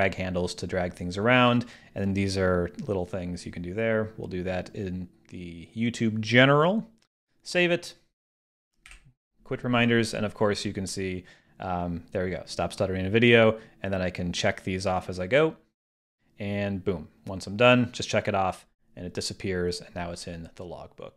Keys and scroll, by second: 8.9 super+q.